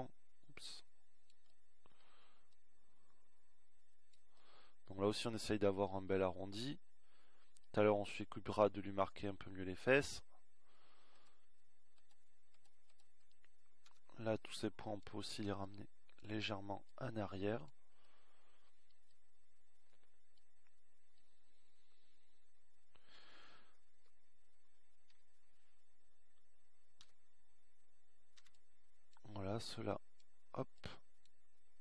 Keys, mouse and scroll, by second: 3.2-6.4 middle drag, 15.7 a, 16.2 b, 26.0 KP_1, 27.2 KP_3, 29.1 a, 30.5 b.